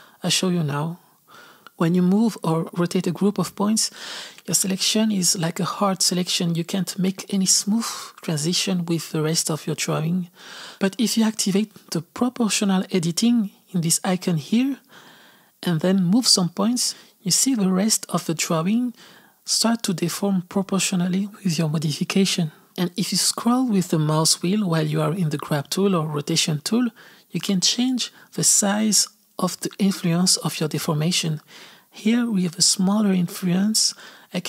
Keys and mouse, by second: 1.2 Left, 2.0 g, 5.3 r, 9.5 g, 11.5 click, 12.1 r, 14.2 click, 17.0 g.